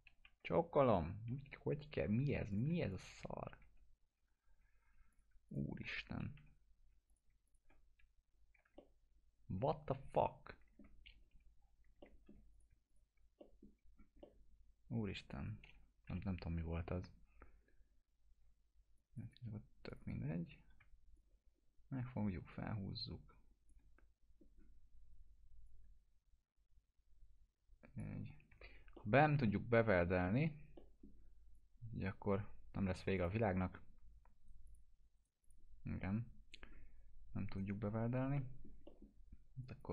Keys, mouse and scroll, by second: 0.2 Delete, 0.9 click, 1.3 Delete, 2.5 click, 2.9 shift+click, 3.6 Delete, 5.1 click, 5.1 click, 5.5 shift+click, 6.4 Delete, 7.1 click, 7.5 shift+click, 8.8-11.0 alt+middle drag, 11.3 Delete, 12.0 alt+middle click, 12.5 click, 12.9 shift+click, 13.4 middle click, 13.7 scroll down 1, 14.2-15.1 alt+middle click, 15.3 click, 16.1 Delete, 16.6 scroll up 1, 18.4 2, 19.0 click, 21.2-24.0 shift+drag, 24.0-24.8 scroll up 2, 24.8-25.7 scroll down 2, 25.7-28.1 drag, 28.2 scroll down 1, 28.5 1, 29.0 middle click, 29.2 scroll down 1, 29.5-30.4 alt+middle drag, 31.5-32.2 drag, 34.4 right click, 34.7 click, 35.4 click, 35.8 scroll up 1, 37.5 right click, 38.4 middle click, 39.6 click.